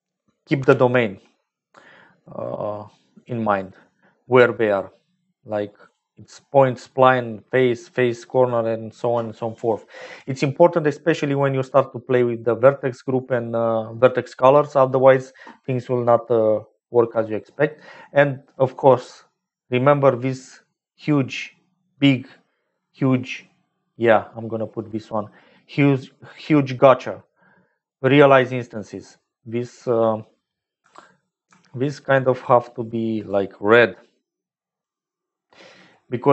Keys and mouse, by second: 0.5 n, 5.7-8.0 drag, 8.3 click, 11.6 click, 17.2-18.2 middle drag, 19.2 middle click, 20.7 click, 22.3 click, 25.9 middle click, 27.8 click, 28.8 middle click, 30.7 n, 31.4 n, 32.2 click, 33.1-34.2 drag, 34.4 click.